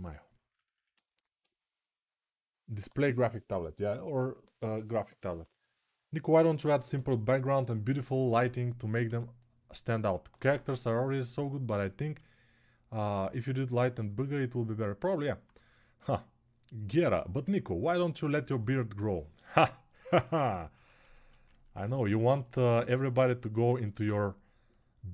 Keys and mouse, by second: 10.2 right click, 11.1-21.2 alt+drag, 21.2-25.1 ctrl+alt+right drag, 23.0 alt+q, 23.5 alt+q.